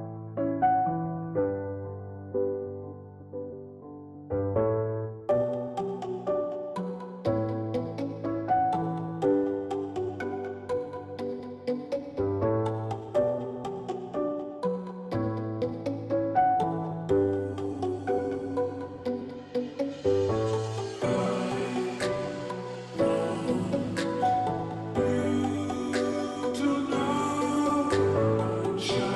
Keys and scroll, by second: 16.6-17.3 ], 17.5 ], 17.7 ], 23.8 \, 24.4 ], 24.6 ].